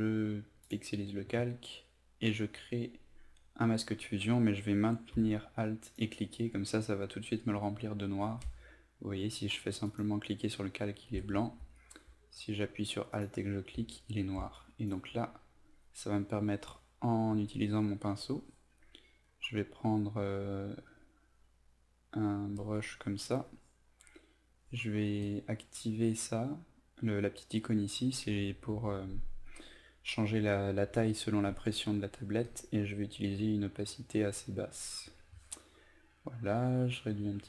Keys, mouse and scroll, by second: 0.7 click, 5.9 alt+click, 8.3 ctrl+alt+z, 9.9 click, 13.2 alt+click, 14.6 click, 17.4 b, 18.7 right click, 20.5 click, 36.2 right click, 36.9-37.4 drag.